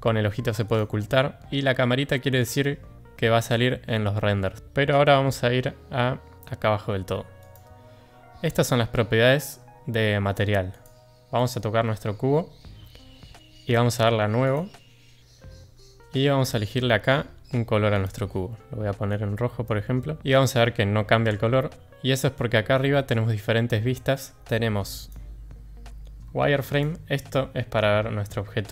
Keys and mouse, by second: 0.6 click, 7.4 click, 14.4 click, 17.9 click, 26.7 click, 27.3-28.6 middle drag.